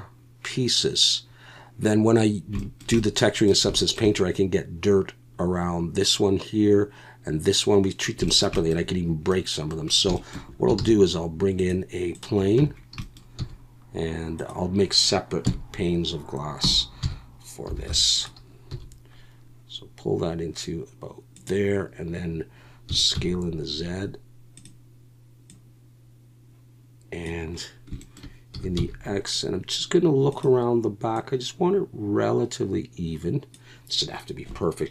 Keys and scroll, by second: 10.8 shift+a, 12.6 Tab, 13.4 s, 15.4 KP_1, 16.6-18.7 typing, 22.9 s, 23.1 z, 28.5 s, 28.7 x.